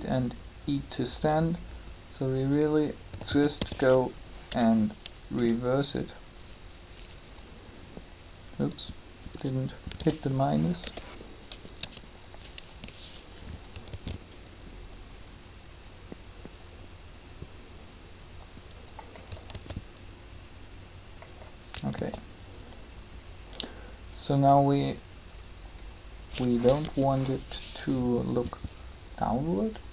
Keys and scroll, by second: 3.1 typing, 5.3 1, 9.9 s, 13.9 alt+a, 19.5 alt+a, 21.9 alt+a, 26.7 3.